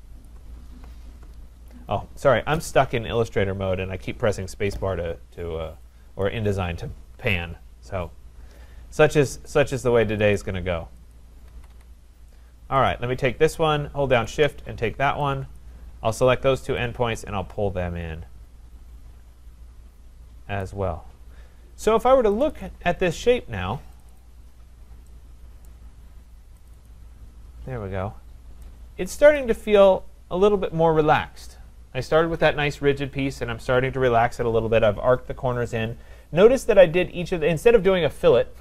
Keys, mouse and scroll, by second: 0.0-1.0 scroll, 0.3 click, 3.0-3.6 scroll, 3.6-4.4 scroll, 5.0-5.4 scroll, 6.2 click, 9.5 click, 10.3 click, 11.3 click, 11.5 Escape, 11.7 Escape, 12.9 click, 14.3 shift+click, 15.6 click, 20.4 click, 22.4 click, 22.6 click, 24.0 click, 24.2 click, 24.6-25.6 scroll, 25.7 right click, 26.7 click, 26.9 click, 27.3-28.6 scroll, 29.4 right click, 29.6-30.1 scroll, 30.5-31.9 scroll.